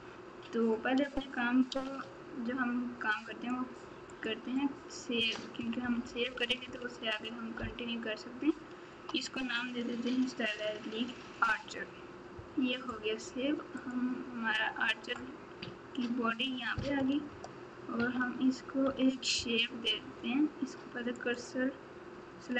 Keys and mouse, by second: 1.7 ctrl+s, 13.8-15.4 drag, 18.8 KP_Subtract, 21.2 click.